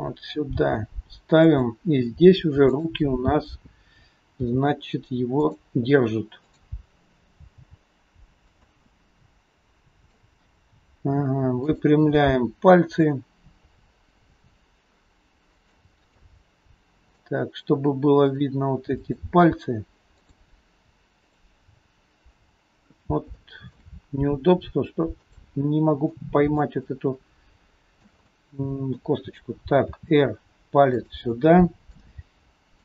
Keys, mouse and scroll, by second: 0.6 g, 2.8 click, 3.3-3.6 scroll up 2, 4.5 g, 6.5 click, 7.6 g, 9.0 middle click, 11.6 click, 12.3 middle click, 14.4 r, 16.1 middle click, 18.3 click, 19.0 click, 20.1 click, 21.3 click, 22.4-22.9 scroll up 2, 23.4 shift+middle click, 23.4-23.9 shift+scroll up 1, 24.1 scroll up 1, 25.3 click, 26.2 middle click, 26.9 shift+middle click, 28.3 scroll up 1, 28.4 middle click, 29.9 r, 31.4 middle click, 31.4-31.9 scroll up 1.